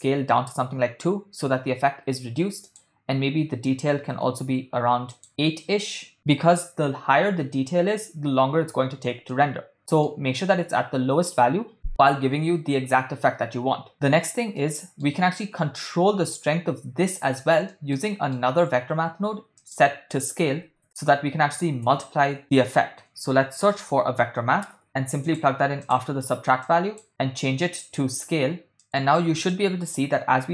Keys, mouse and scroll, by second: 2.7-4.3 drag, 5.3 click, 9.4-10.2 ctrl+middle drag, 14.6 middle click, 17.7 ctrl+middle click, 18.1 middle click, 19.5 shift+a, 22.3 BackSpace, 23.5 BackSpace, 24.8 BackSpace, 26.1 BackSpace, 26.7 click, 27.6-28.8 drag, 29.5-30.5 drag.